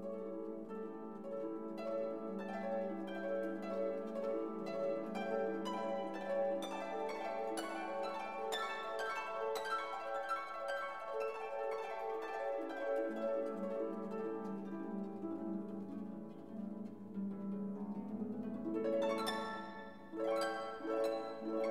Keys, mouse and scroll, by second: 1.4 /, 3.6 shift+9, 4.1 shift+3, 4.6 0, 7.1 shift+=, 8.3-12.5 typing, 13.7 0, 16.6-19.3 typing, 21.6 Return.